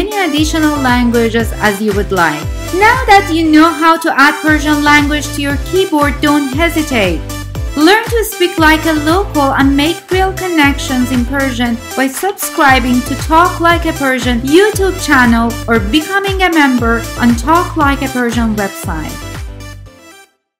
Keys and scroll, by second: 0.0-0.1 typing.